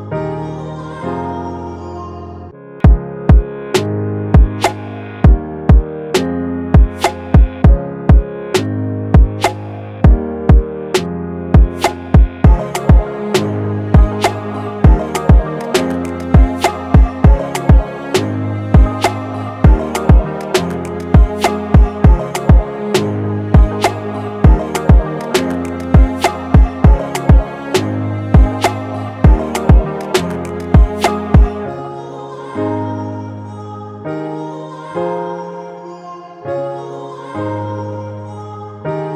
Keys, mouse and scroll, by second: 7.2 ctrl+click, 10.5 right click, 15.1 Right, 15.4 ctrl+t, 16.3 alt+shift+click, 25.9 alt+shift+click, 27.3 Return, 28.4 Up, 28.6 Up, 31.9 Right, 32.1 Right.